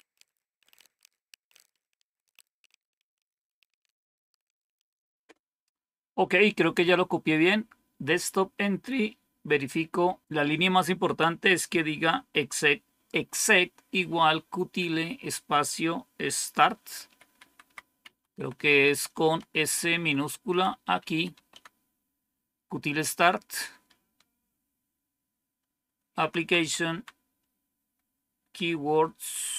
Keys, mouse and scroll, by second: 0.0-5.4 typing, 17.0 Up, 17.2 Up, 17.3 Up, 17.5 Up, 17.9 Down, 18.3 Right, 18.5 Right, 18.6 Right, 18.8-19.9 Right, 20.9 Left, 21.2 s, 21.4 Delete, 26.1 Down, 26.3 Down, 26.5 Down, 26.8 Down.